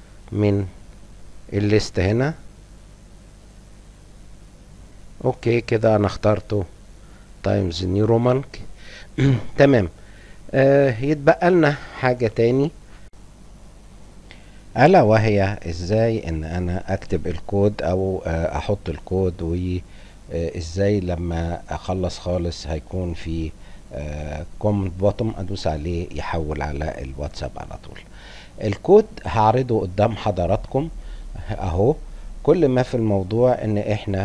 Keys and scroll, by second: 0.8-2.3 typing, 3.4 t, 4.3 i, 5.1 BackSpace, 5.3 Return, 7.6 Return, 10.3 F8, 11.9 F12.